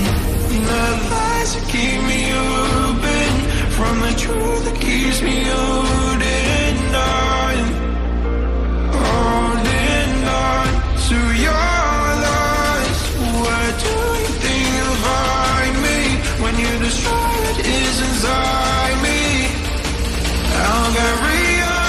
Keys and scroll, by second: 2.7 ctrl+d, 4.9 ctrl+a, 7.7 ctrl+a, 7.8 ctrl+d.